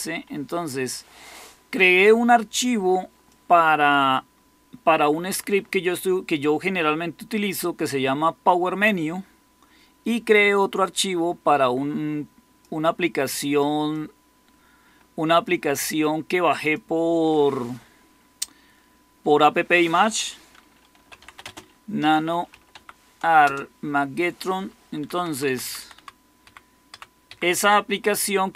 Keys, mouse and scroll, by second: 20.6-22.4 typing, 22.7 Tab, 23.3 Return, 24.9 Down, 25.1 Down, 25.2 Down, 25.4 Down, 25.5 Down, 25.9 Down, 26.3 Up, 26.8 Down, 27.2 Up, 27.7-28.4 Right.